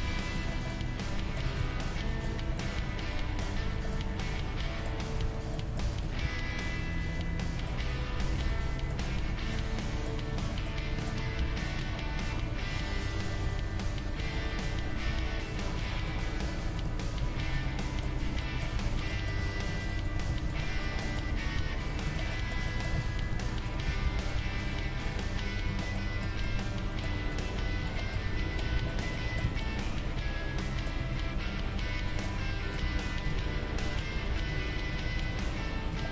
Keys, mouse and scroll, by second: 0.7 middle click, 1.6 Tab, 5.2 Tab, 5.9 right click, 6.2 g, 10.0-12.4 middle drag, 10.4-12.1 right drag, 11.4 g, 13.2-16.4 right drag, 13.4 g, 14.8-17.0 middle drag, 15.1 g, 16.4 g, 17.0 right click, 17.2 g, 17.8 middle click, 19.4 g, 20.3 g, 20.8 right click, 21.3 g, 22.6-23.6 middle drag, 23.0 g, 23.6 click, 23.9 g, 24.5 right click, 25.9 middle click, 27.3-29.1 right drag, 27.6 g, 29.5 Tab, 31.0 Tab, 32.1 right click, 32.2-34.0 middle drag, 32.9 g, 34.0-35.2 right drag, 34.6 g, 35.4 g.